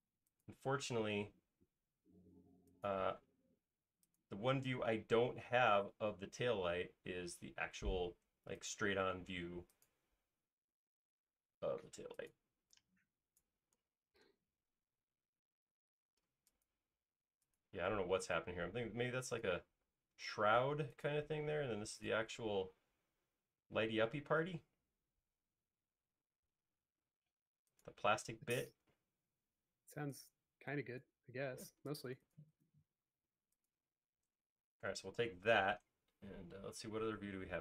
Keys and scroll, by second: 3.5 l, 4.2 l, 9.1 l, 12.5 e, 13.7-15.0 typing, 30.8 e, 31.5 space, 35.5 m.